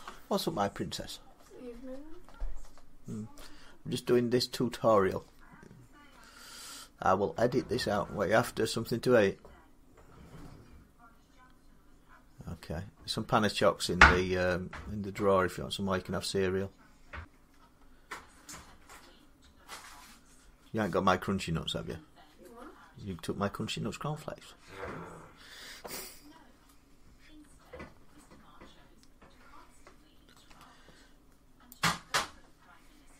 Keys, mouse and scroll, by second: 17.0 click, 17.0 s, 17.3 middle click, 30.3 s, 31.7-33.1 drag.